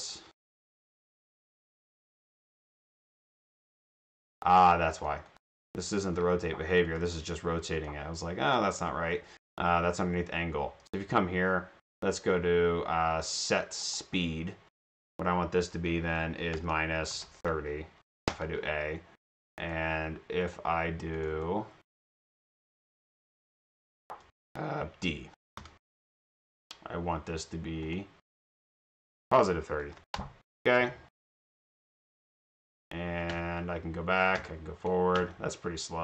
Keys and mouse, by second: 0.0 drag, 1.3 click, 1.5 click, 2.6 click, 5.0 click, 5.4 click, 6.7 click, 6.9 click, 7.7 click, 13.9 click, 14.0 click, 18.4 Return, 19.7 right click, 20.4 click, 21.2 click, 21.3 middle click, 21.9 drag, 22.5 click, 23.0 click, 23.2 Delete, 23.5 click, 25.3 click, 27.9 click, 28.6 click, 28.8 click, 30.1 Return, 31.3 click.